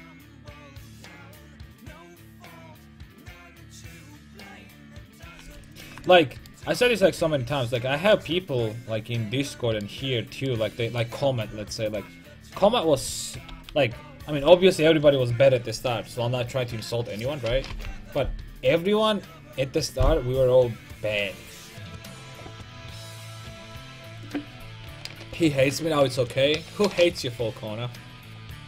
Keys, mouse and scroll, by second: 0.3 c, 5.4-7.2 right drag, 5.5 x, 7.3 alt+h, 7.9 Tab, 13.5 KP_5.